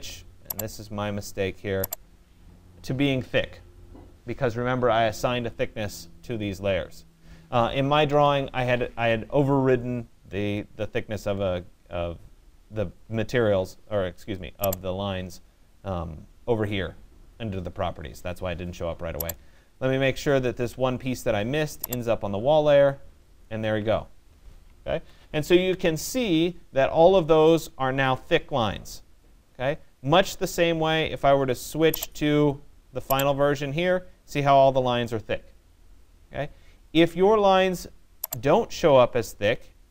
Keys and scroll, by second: 7.6 Escape, 24.5 Escape.